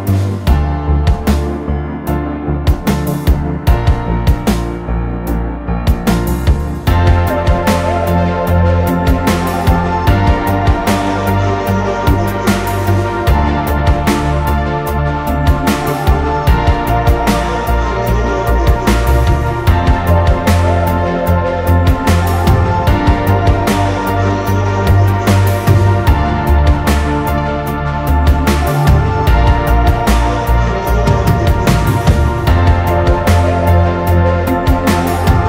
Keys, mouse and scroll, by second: 24.2 alt+click, 27.5-28.0 alt+scroll down 1.